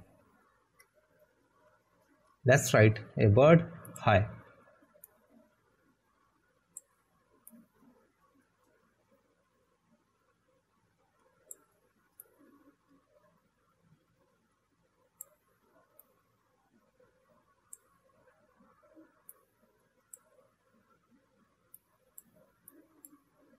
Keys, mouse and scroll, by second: 2.1 click, 3.9 Delete, 6.4 click.